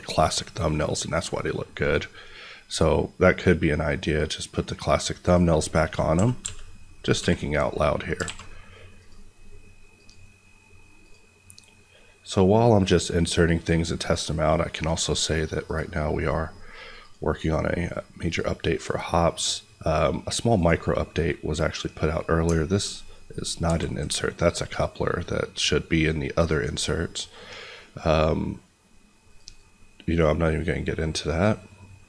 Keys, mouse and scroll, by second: 3.0 click, 5.6 middle click, 6.1 g, 6.4 x, 7.1 y, 8.0 click, 8.3 a, 8.4 middle click, 8.9 click, 19.9-20.5 scroll down 1, 20.5 click, 20.8 middle click, 23.6 ctrl+z, 24.6 click, 28.1 middle click, 29.2 click, 30.8-32.0 scroll up 1.